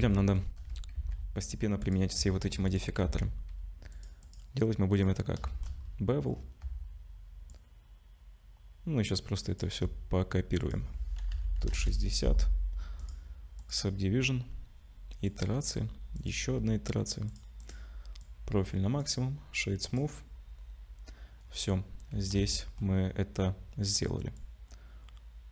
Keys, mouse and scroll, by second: 0.1 shift+middle click, 0.9 ctrl+s, 1.8 click, 2.3 shift+middle click, 2.7 click, 3.0 ctrl+s, 3.9 click, 4.2 click, 5.5 shift+middle click, 5.8-7.2 scroll up 5, 7.5 shift+click, 10.6 click, 13.0 click, 16.1 click, 17.3 click, 18.2 click, 19.0 right click, 21.5 scroll down 1, 22.1 scroll down 2, 22.5 shift+middle click, 24.4 shift+click.